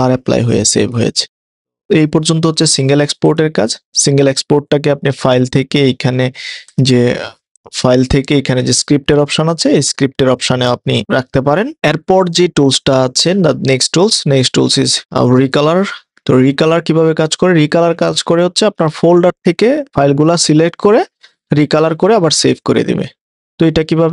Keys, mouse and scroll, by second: 4.0 click, 5.3 click, 13.2 click, 16.7 click, 19.9 click.